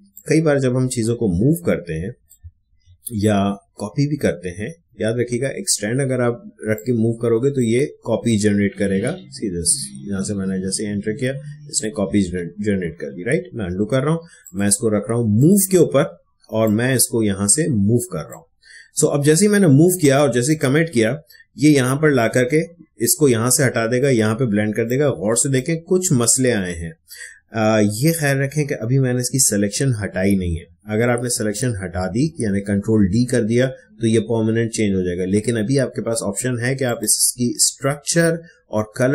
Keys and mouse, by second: 0.1-2.6 drag, 2.6 ctrl+z, 4.6 Escape, 6.7-11.8 drag, 12.2 ctrl+z, 14.4-22.7 drag, 24.5 click, 24.8 ctrl+click, 25.0 ctrl+space, 36.8 click.